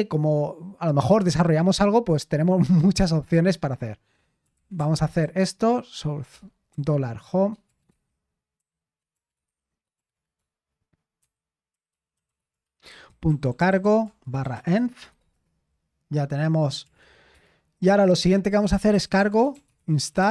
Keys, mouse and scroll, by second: 4.2-17.4 typing, 18.6-20.3 typing.